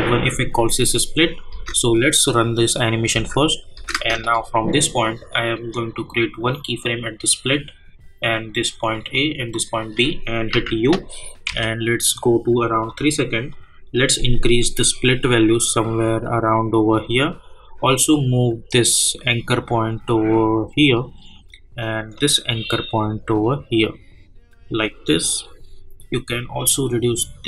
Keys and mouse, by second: 1.5 space, 6.4 click, 8.7 click, 10.5-11.9 typing, 12.8-27.4 drag, 22.4-25.6 drag, 26.9 click.